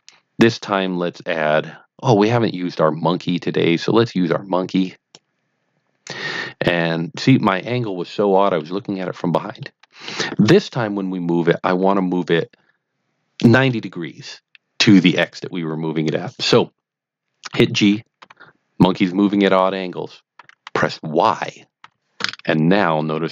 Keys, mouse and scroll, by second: 4.8 click, 6.7-7.6 middle drag, 8.1-8.6 middle drag, 8.8-9.5 scroll up 1, 9.5 middle click, 11.6-12.2 scroll down 1, 18.3 g, 21.7 y.